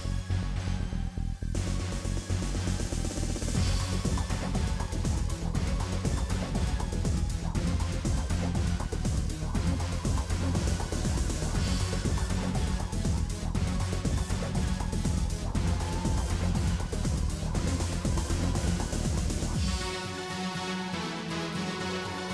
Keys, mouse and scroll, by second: 0.0 scroll up 1, 0.2 shift+middle click, 0.7 right click, 1.1 click, 1.8 right click, 2.3 click, 2.7 shift+middle click, 3.3 shift+click, 3.7 middle click, 4.0 scroll down 1, 4.3 f, 4.5 shift+click, 5.0 f, 5.1 middle click, 5.8 shift+click, 6.0-12.1 typing, 6.2 shift+click, 6.8 shift+click, 7.2 shift+click, 7.6 shift+click, 8.2 shift+click, 8.7 shift+click, 9.3 shift+middle click, 9.6 shift+click, 10.1 shift+click, 10.8 shift+click, 11.4 shift+click, 11.8 shift+click, 12.3 middle click, 12.8 shift+click, 13.2 f, 13.2 middle click, 13.8 shift+click, 14.2 f, 14.5 shift+click, 14.7 f, 14.9 shift+click, 15.2 f, 15.4-16.7 middle drag, 16.7 scroll down 1, 16.8-17.9 middle drag, 17.9 middle click, 18.4 2, 18.8 click, 19.1 middle click, 19.6 shift+click, 20.0 f, 20.1 shift+click, 20.4 f, 20.5 shift+click, 20.9-21.4 scroll up 2, 21.1 middle click, 21.4 shift+click, 21.8 middle click.